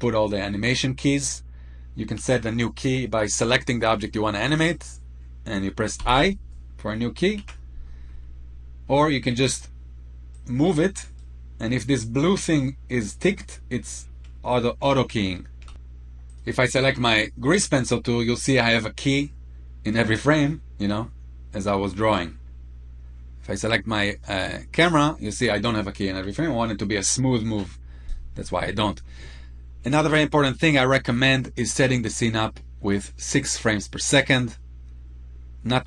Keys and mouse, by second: 5.7 i, 7.2 ctrl+z, 15.5 ctrl+z, 15.9 click, 20.5-21.9 drag, 24.6 click.